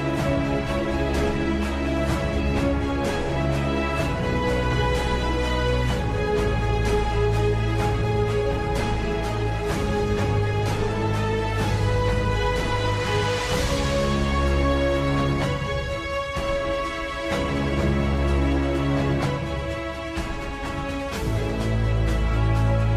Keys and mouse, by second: 2.2 middle click, 3.5 z, 4.2 middle click, 5.5 s, 7.8 s, 10.0 shift+middle click, 11.9 click, 14.1 KP_7, 15.6 middle click, 16.4 shift+middle click, 17.1 middle click, 18.2 KP_3, 19.1 shift+middle click, 20.8 shift+middle click, 21.3 middle click.